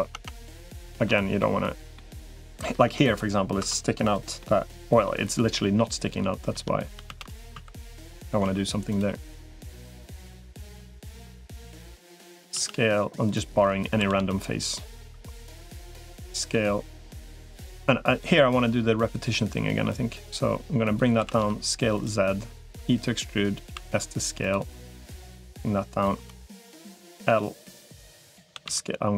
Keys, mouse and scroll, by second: 0.6 shift+middle click, 1.2 middle click, 2.3 Tab, 2.7 Tab, 3.5 Tab, 4.2 middle click, 6.9 shift+d, 7.3 s, 8.3 s, 9.5 middle click, 10.9-11.9 drag, 12.3 s, 13.9 s, 14.9 s, 15.9 middle click, 17.5 click, 18.5 click, 19.9-20.9 drag, 21.1 s, 22.7 e, 23.5 s, 25.3 click, 26.3 click, 26.9 l, 27.7 click, 28.3 s.